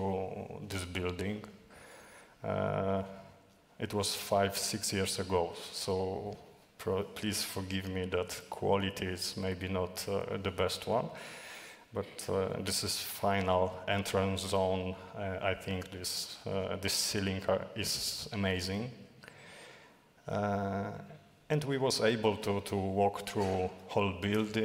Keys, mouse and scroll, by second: 0.3 d, 2.3 d, 2.6 d, 3.6-5.7 typing, 20.4-24.6 typing.